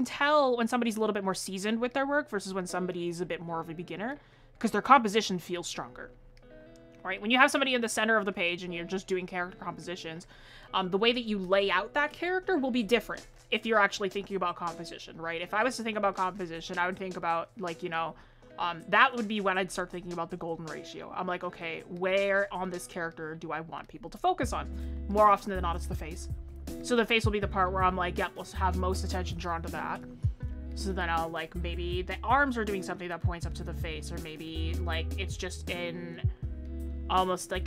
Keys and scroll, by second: 31.2 ctrl+z, 36.9 ctrl+z.